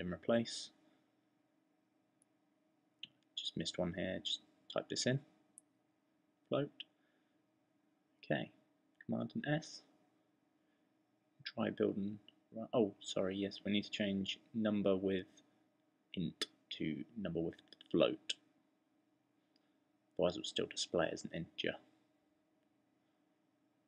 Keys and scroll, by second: 5.2-6.8 typing, 15.5-18.9 typing.